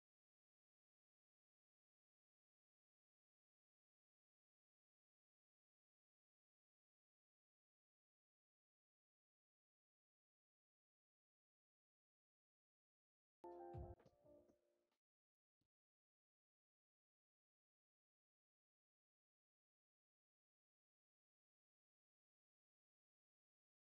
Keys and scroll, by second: 1.0 space, 1.7 ctrl+s, 12.9 u, 17.8 alt+x.